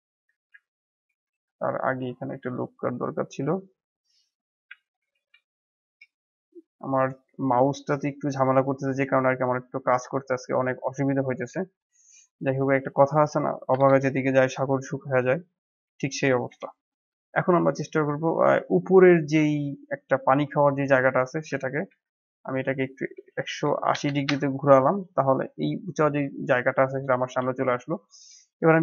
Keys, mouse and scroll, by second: 0.3 ctrl+z, 0.7 middle click, 1.2 ctrl+r, 3.2 ctrl+r, 8.6 Tab, 9.1-11.2 middle drag, 11.2 scroll down 3, 11.5-11.9 shift+middle drag, 11.9-12.7 scroll up 3, 12.7-13.8 drag, 13.8 KP_1, 14.4-14.7 scroll up 1, 14.7 scroll down 6, 15.0-16.4 middle drag, 16.4 KP_7, 17.1-17.7 scroll up 7, 17.9-19.9 shift+middle drag, 19.9 scroll down 1, 20.8-21.8 drag, 21.8 r, 25.1-27.2 middle drag, 27.2 KP_7, 27.9 click, 28.7 shift+a.